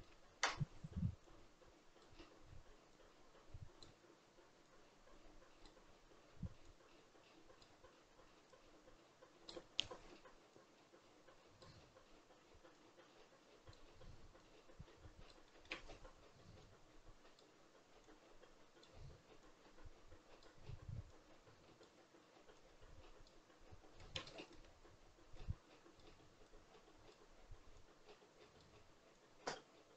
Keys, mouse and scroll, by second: 0.1-1.1 scroll up 1, 1.1-15.3 drag, 15.3-16.4 shift+middle drag, 16.4-23.8 drag, 23.8-24.2 scroll down 1, 24.2-25.2 shift+middle drag, 25.2-29.9 drag.